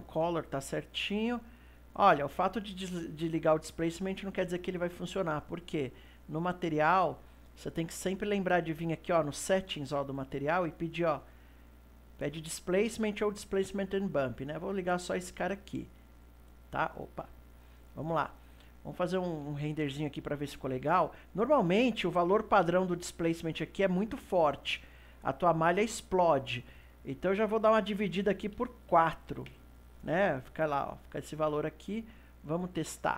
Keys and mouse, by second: 0.4-4.4 middle drag, 6.7 click, 7.7-9.2 middle drag, 9.2 click, 11.7-14.7 drag, 16.1-17.2 middle drag, 17.2 KP_2, 18.9-25.0 shift+middle drag, 25.0 ctrl+s, 27.3-30.4 drag, 32.3 click.